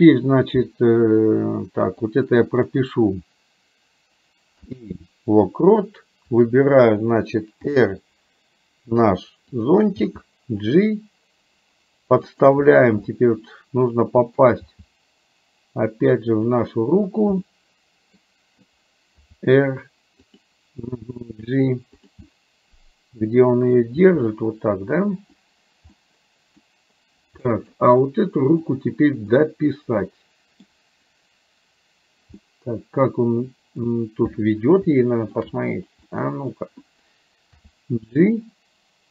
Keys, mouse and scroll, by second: 2.2 click, 4.6 i, 6.4 click, 7.7 r, 10.1 g, 13.2-14.5 middle drag, 14.7 g, 17.5 scroll up 1, 17.6 middle click, 18.2-18.8 scroll down 1, 19.4 r, 21.0 g, 22.2-23.9 middle drag, 26.1 middle click, 27.6 middle click, 28.6 click, 29.4-30.6 middle drag, 32.5-33.9 middle drag, 35.0 shift+middle click, 36.1 middle click, 37.7 g.